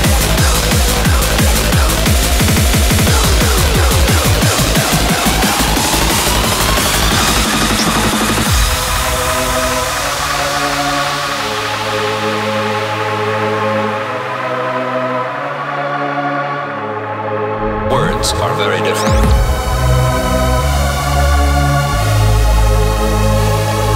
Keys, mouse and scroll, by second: 1.6-4.6 drag, 4.9-8.8 drag, 12.5-14.3 drag, 15.6-17.5 drag, 17.5 middle click, 18.0-19.1 middle drag.